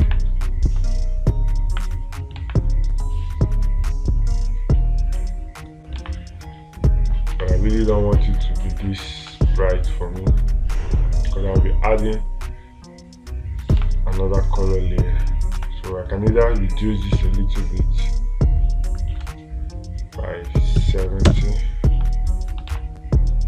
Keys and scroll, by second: 0.5 space, 2.9 space, 6.5 space, 14.3 space, 16.0 space, 23.2 space.